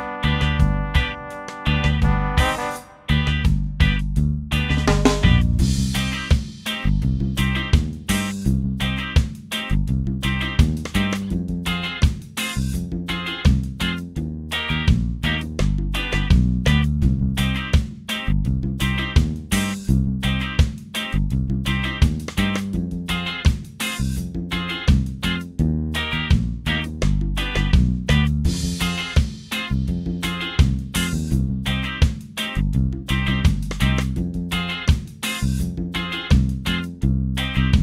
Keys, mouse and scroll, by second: 0.4 click, 2.9 click, 5.4 click, 7.2 click, 11.0 click, 12.8 click, 14.3 shift+click, 16.7 shift+click, 18.3 shift+click, 20.6 shift+click, 21.5 shift+click, 23.3 Delete, 24.9 scroll up 2, 25.5-26.0 scroll up 3, 26.9-29.6 drag, 30.7-34.0 drag.